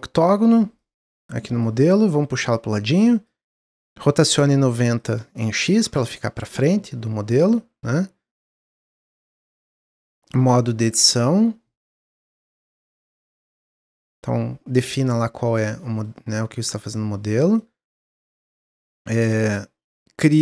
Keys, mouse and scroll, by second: 0.7-2.6 drag, 3.8 click, 4.8-6.8 drag, 6.8 middle click, 7.6 s, 8.8 middle click, 9.5 Tab, 10.2 middle click, 10.7 click, 11.1 s, 12.2-13.5 middle drag, 13.5 Tab, 13.7-15.0 middle drag, 15.0 scroll up 1, 15.3-15.7 scroll down 1, 15.7-16.6 middle drag, 16.6 Tab, 16.9 Tab, 17.3 scroll down 1, 17.3-18.2 middle drag, 18.2 Tab, 18.5 middle click, 19.0 Tab, 19.8-20.4 drag.